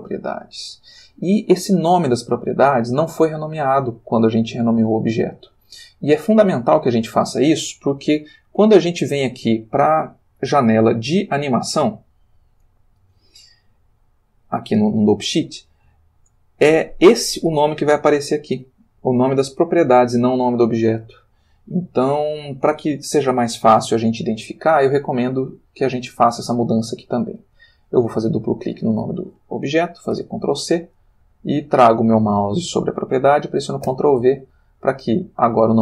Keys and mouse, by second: 14.3 click, 16.6 click, 22.4 click, 27.3 click, 30.1 ctrl+c, 31.0 click, 33.9 ctrl+v.